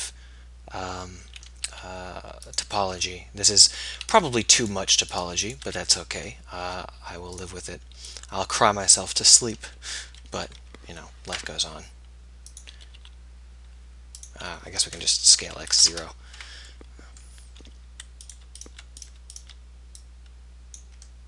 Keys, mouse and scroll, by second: 1.8 s, 3.1 click, 3.3 middle click, 4.9-7.4 middle drag, 6.6 e, 7.4-9.1 drag, 9.7 KP_3, 10.1 KP_1, 13.0 r, 15.4 s, 21.0 middle click.